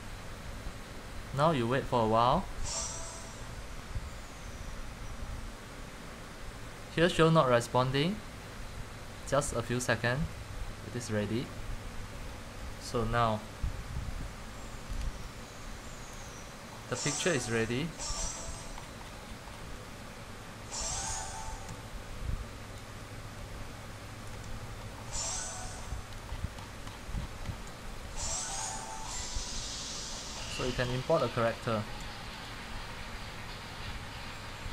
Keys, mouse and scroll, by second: 11.3 click, 17.9-18.3 scroll, 19.6 1, 21.0 c, 21.2 shift+scroll, 23.0-24.1 typing, 24.3 click, 24.7 middle click, 27.7-29.1 typing, 30.6 middle click, 30.9 shift+middle click, 32.6 click.